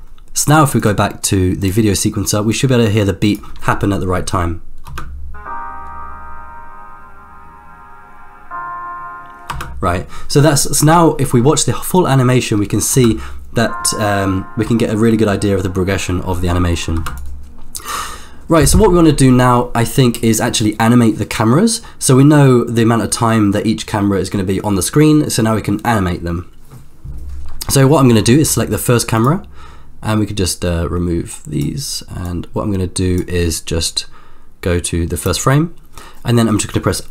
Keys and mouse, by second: 1.7 click, 2.5-3.6 drag, 5.0 space, 9.6 space, 12.0-13.2 drag, 13.2 space, 17.0 space, 17.2 click, 29.1 click, 31.4 click, 32.3 click, 33.9-35.5 drag.